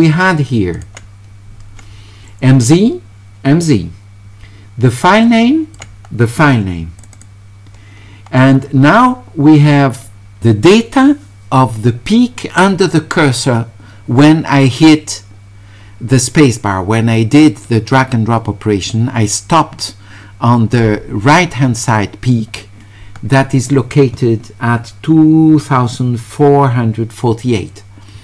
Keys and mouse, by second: 0.7 click, 5.4 click, 7.0 click.